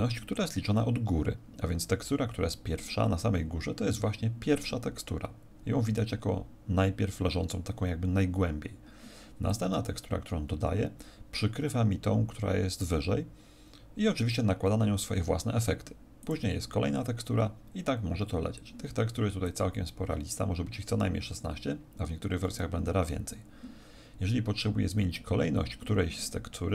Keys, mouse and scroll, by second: 9.4 click, 16.1 click, 19.4 click.